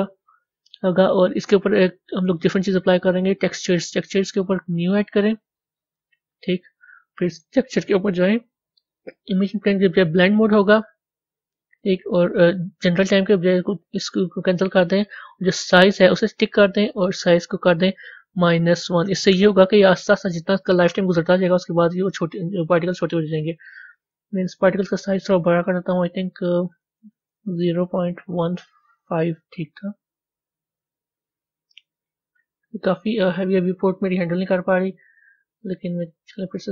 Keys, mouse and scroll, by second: 5.1 click, 10.2-13.1 drag, 16.1 click, 16.8-19.8 drag, 26.1-26.8 scroll down 4, 26.9-29.5 drag, 30.7 click, 33.1 click, 34.3-35.7 middle drag, 35.7-36.7 drag.